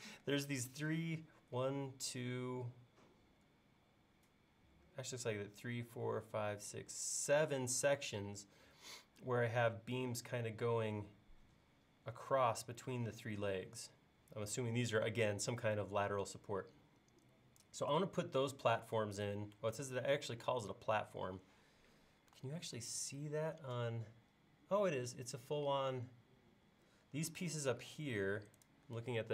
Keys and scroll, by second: 22.6 super+Tab.